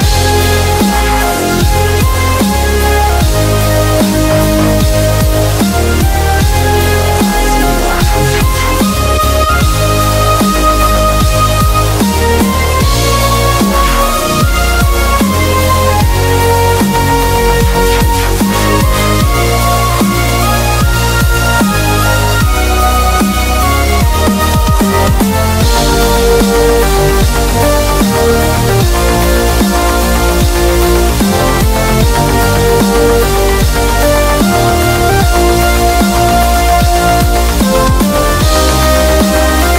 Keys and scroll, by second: 1.9 typing, 3.4-4.1 typing, 5.9 super+-, 6.2 super+-, 10.1-12.7 typing, 22.7 b, 26.0 typing, 28.2 typing.